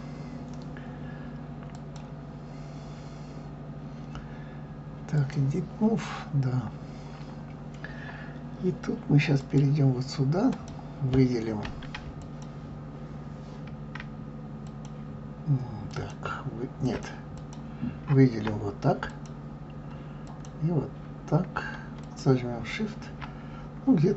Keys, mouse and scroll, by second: 1.7-4.8 drag, 6.3 scroll up 2, 6.9-8.4 scroll up 2, 9.4 click, 10.5 click, 12.2 shift+click, 14.7 alt+shift+click, 15.9 alt+shift+click, 16.8 alt+shift+click, 17.4 click, 19.1 alt+click, 20.3 alt+click, 22.0 alt+shift+click.